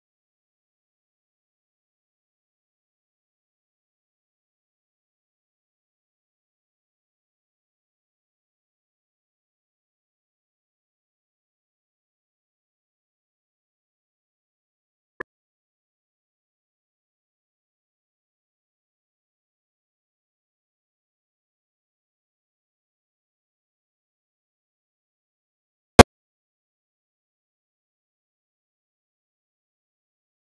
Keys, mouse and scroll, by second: 0.2 x, 0.4 click, 0.5 shift+a, 5.1-6.9 drag, 6.9-7.7 middle drag, 7.7 click, 8.1 middle click, 8.6 click, 9.0 middle click, 9.7 click, 9.8 shift+a, 12.5 click, 13.1 shift+a, 15.7-18.7 drag, 19.4 click, 19.9 scroll down 1, 20.2-20.9 middle drag, 20.9-21.6 ctrl+shift+drag, 21.6-22.0 scroll up 2, 22.0-28.1 drag, 28.1-29.0 middle drag, 29.0 scroll down 3, 29.2 middle click, 29.6 click, 29.9 shift+d.